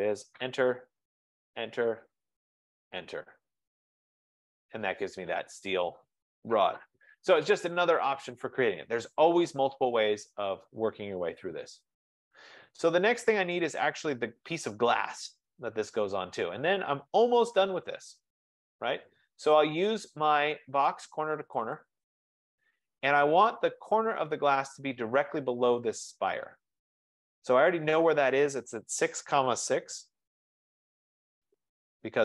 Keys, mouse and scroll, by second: 0.4 Return, 1.4 Return, 2.4 F15, 2.6 Return, 3.8-4.6 scroll, 4.7 F15, 21.9 click, 23.7-24.5 scroll, 24.5 scroll, 29.1-30.0 typing, 30.8 Return.